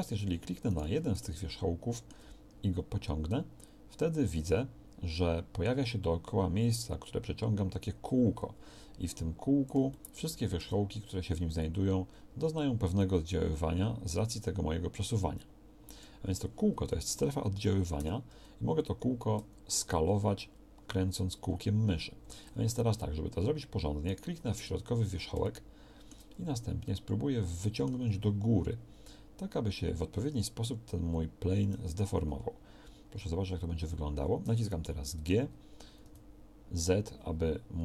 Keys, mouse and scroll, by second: 1.4-3.7 middle drag, 9.7 middle click, 18.0-25.8 middle drag, 18.0 g, 31.8 z, 35.2 g.